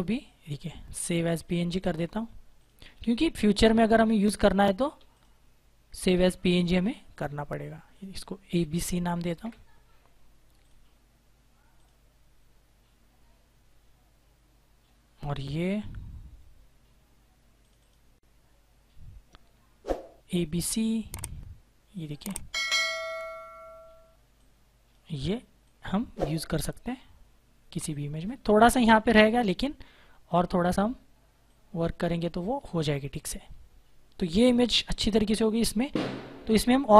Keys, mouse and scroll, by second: 5.0 click, 8.3-9.8 typing, 10.5 click, 17.5 click, 18.6-19.1 scroll down 1, 19.1-20.9 scroll up 1, 21.8 click, 23.6 click, 31.3 shift+click, 33.0 Return, 35.0 click.